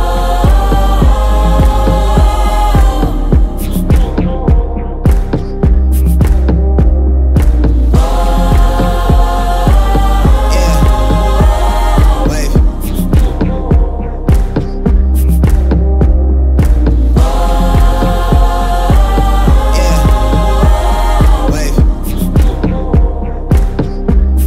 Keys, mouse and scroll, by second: 2.9 click, 11.9-12.8 drag.